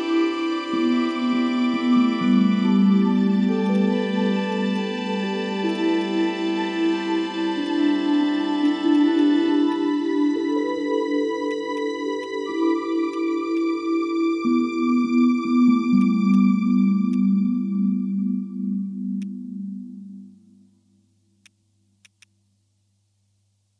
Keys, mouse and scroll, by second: 1.3 ctrl+click, 2.8 ctrl+i, 3.8 double click, 5.8 double click, 10.2 typing, 10.4 Return, 16.0 right click, 18.2 ctrl+z, 19.2 alt+click, 21.4 ctrl+click, 21.8 ctrl+z, 22.0 right click.